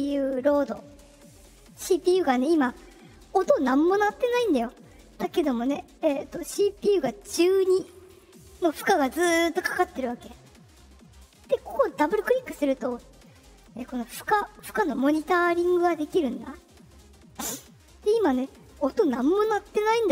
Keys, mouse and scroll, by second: 11.9 click, 12.0 click, 13.6-14.9 drag.